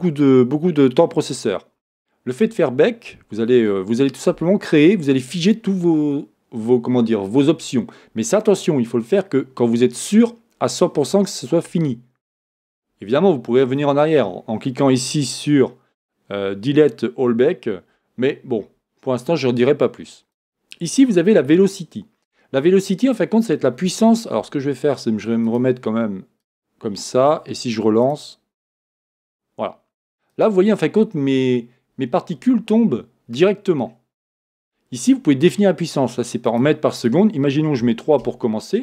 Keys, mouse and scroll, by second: 20.4-28.9 drag, 20.9 scroll down 1, 29.0-30.6 drag, 33.4 scroll up 1, 33.8-36.5 scroll down 2, 36.5-38.8 drag, 38.3 Return.